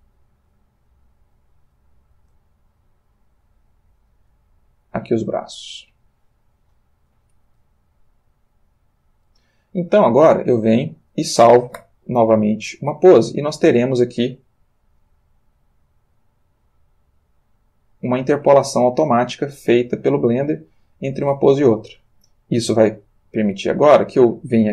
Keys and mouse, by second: 0.8 click, 1.7 click, 2.3 r, 3.8 click, 4.3 g, 5.8 click, 6.7 click, 7.5 r, 8.4 click, 12.1 i, 12.5 click, 13.5-24.5 drag.